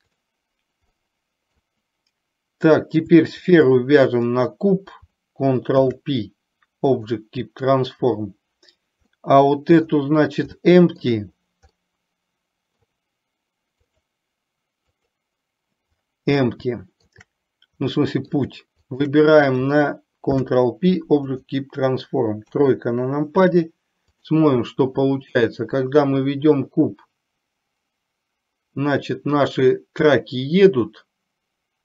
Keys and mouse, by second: 1.2 middle click, 5.8 ctrl+p, 9.2-9.9 middle drag, 10.7-11.2 shift+middle drag, 11.8-12.9 middle drag, 16.8-17.2 shift+middle drag, 17.9 middle click, 18.9 shift+click, 20.4 ctrl+p, 22.6 KP_3, 24.1 click, 25.6-31.8 drag.